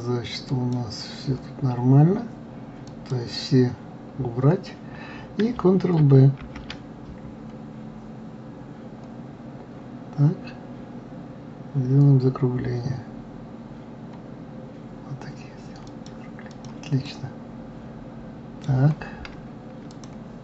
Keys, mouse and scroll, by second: 0.9 click, 3.3-4.1 drag, 4.1-4.6 scroll down 2, 4.8-6.7 scroll up 2, 6.9 ctrl+b, 16.9-17.2 drag, 17.5-20.3 middle drag, 20.3 click.